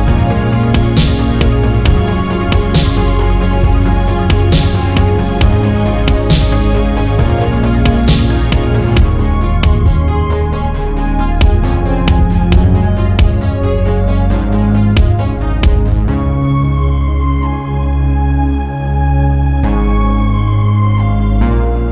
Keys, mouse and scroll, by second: 0.8 ctrl+right click, 1.9-2.8 scroll down 5, 3.4 alt+middle click, 4.1 scroll down 2, 5.1-7.1 ctrl+right drag, 7.2-9.9 ctrl+drag, 11.1 scroll down 2, 11.6-12.4 scroll up 4, 13.7-15.2 scroll up 5, 16.9 click, 18.2-18.7 scroll up 3, 18.9 scroll down 2, 19.1-19.5 scroll up 3, 20.4-21.7 scroll down 5.